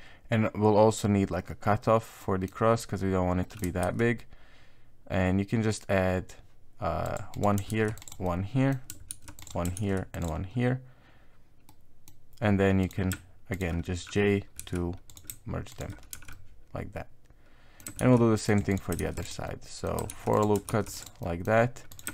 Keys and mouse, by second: 2.2 middle click, 3.4 middle click, 3.8 ctrl+r, 7.7 ctrl+r, 8.2 middle click, 9.1 ctrl+r, 11.7 middle click, 12.8 right click, 13.5 shift+right click, 14.6 j, 15.1 right click, 15.7 shift+right click, 16.1 j, 16.3-17.8 middle drag, 18.0 ctrl+r, 19.0 ctrl+r, 19.4 middle click, 20.7 ctrl+r, 21.2 middle click, 21.9 right click.